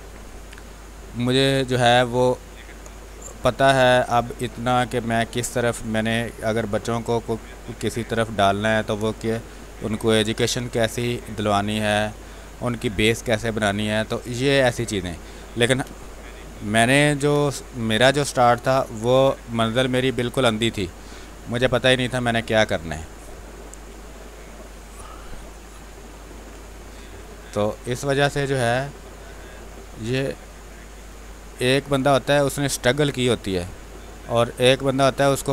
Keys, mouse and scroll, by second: 1.1 space, 1.4 click, 1.6 space, 2.6-6.8 drag, 6.8 space, 7.0 click, 7.3 space, 8.2 click, 9.4-11.1 drag, 11.1 click, 12.1 space, 12.3 click, 12.6 space, 13.3-14.6 drag, 15.0 space, 15.4 click, 15.5 space, 16.0 r, 16.1 click, 17.0 b, 17.4 space, 17.5 click, 18.1 space, 18.7-20.7 drag, 20.7 space, 20.9 click, 21.2 space, 22.1-26.3 drag, 26.3 space, 26.4 click, 26.7 space, 27.5-29.4 drag, 29.4 space, 29.6 click, 29.9 space, 30.5 click, 31.2 space, 31.5 click, 31.7 space, 32.8-35.5 drag.